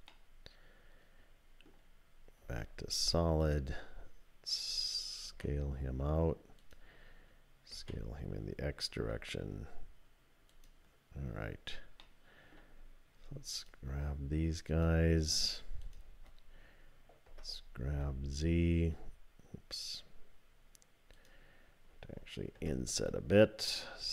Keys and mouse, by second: 0.1-1.7 middle drag, 2.4 z, 5.3 s, 7.7 s, 12.0 click, 17.3 g, 21.1 click, 22.6 i, 24.0 s.